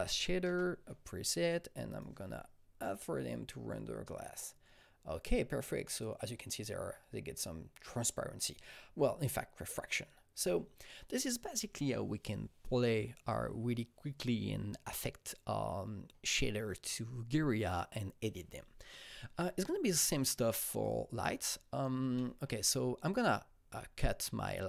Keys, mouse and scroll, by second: 0.0-0.2 typing, 0.4 Return, 1.2-5.9 drag, 1.4 Return, 1.4 Up, 6.1 Return, 6.1 click, 6.2-19.6 drag, 19.6 alt+Num_Lock, 19.6 click, 19.9 alt+middle click, 19.9-20.5 scroll, 20.8-22.9 drag, 22.1 alt+middle click, 22.2-22.9 scroll, 22.9 scroll up 2, 23.3-23.9 scroll down 4, 24.2 scroll up 1.